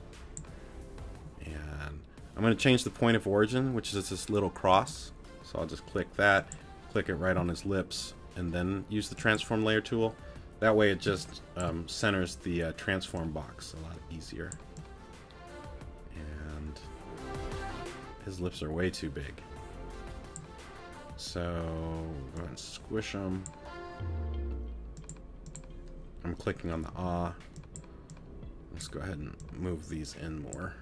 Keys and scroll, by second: 11.1 space, 26.9 t.